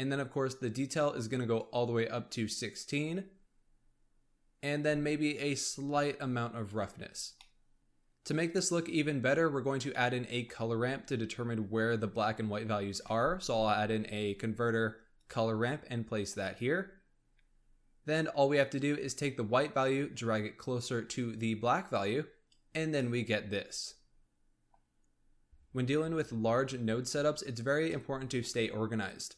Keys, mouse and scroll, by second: 0.8-3.9 drag, 4.7-7.2 drag, 7.2 scroll down 1, 7.4-8.2 middle drag, 9.4-9.8 scroll down 7, 9.8 middle click, 10.5-11.2 scroll up 5, 11.2-12.9 scroll up 1, 12.9 shift+a, 17.1-19.0 scroll up 3, 19.0-22.1 drag, 22.8 scroll down 1, 22.9-25.5 middle drag, 25.5-26.7 scroll down 1, 26.7-27.8 scroll down 11, 27.8-29.0 middle drag, 29.0 click.